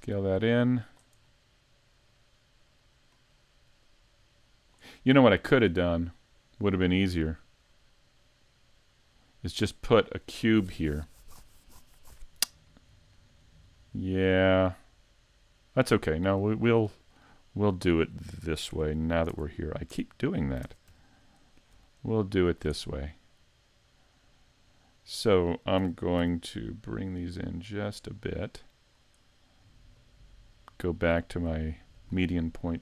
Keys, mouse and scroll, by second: 0.9 click, 1.3 middle click, 3.8 click, 5.1-6.4 scroll down 2, 6.4 middle click, 9.1-9.7 scroll up 3, 9.9 shift+middle click, 13.9 middle click, 17.2 middle click, 18.4 ctrl+Tab, 18.7 2, 19.3 ctrl+Tab, 19.9 Tab, 20.6 ctrl+Tab, 21.4 right click, 22.3 shift+right click, 22.8 middle click, 25.8 s, 28.2 right click, 28.6 middle click, 30.0 click, 32.5 middle click.